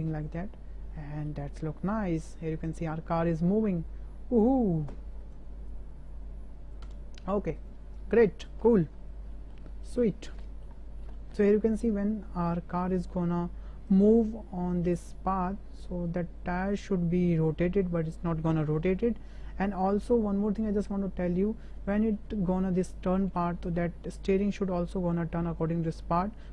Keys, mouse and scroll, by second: 1.0 shift+click, 1.2 shift+middle click, 6.8 space, 7.6 click, 8.3 shift+middle click, 8.7 shift+click, 9.3 shift+click, 10.0 middle drag, 10.4 shift+middle drag, 11.1 shift+middle click, 13.9-17.7 drag, 18.1-20.1 drag, 21.1 shift+drag, 21.9 shift+drag, 22.9-23.2 drag, 24.1 shift+drag.